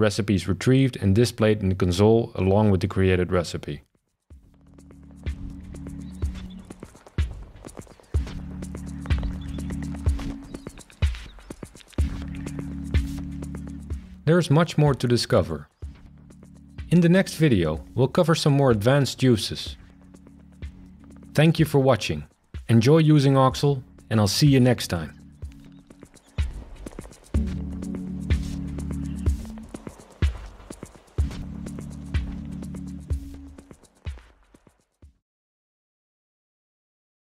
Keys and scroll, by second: 1.7 shift+super+r.